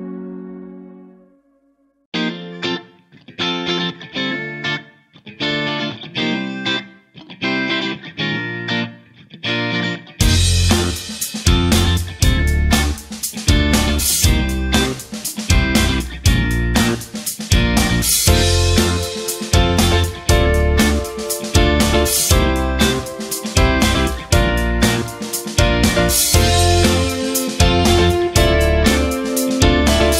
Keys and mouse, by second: 0.0 KP_3, 0.4 shift+middle drag, 1.5 shift+middle drag, 2.8 shift+a, 8.6-9.0 shift+middle drag, 9.6 x, 10.3 shift+c, 11.7 shift+middle drag, 12.4 shift+a, 14.1 middle drag, 14.6 KP_1, 15.3 shift+middle drag, 15.8 Tab, 16.3 s, 18.7 KP_3, 19.2 shift+middle click, 19.8 s, 21.2 Tab, 21.4 g, 22.6 shift+middle click, 23.1 Tab, 23.5 shift+middle click, 24.1 alt+z, 24.3 right click, 24.7 b, 26.3 s, 29.9 right click.